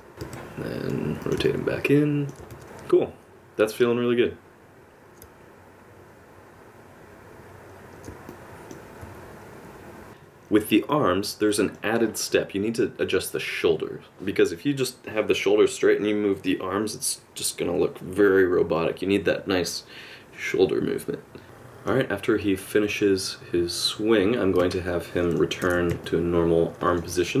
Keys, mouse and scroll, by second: 0.2 r, 1.4 middle click, 2.5 r, 2.6 space, 8.3 middle click, 10.1 click, 10.6 middle click, 11.5 shift+middle click, 11.9 middle click, 12.3 r, 13.4 middle click, 14.1 middle click, 14.9 middle click, 15.6 middle click, 17.3 i, 18.1 middle click, 18.4 space, 19.0 space, 19.8 space, 20.0 middle click, 21.3 alt+r, 21.4 shift+click, 22.4 click, 24.8 middle click, 25.6 alt+r, 26.0 middle click.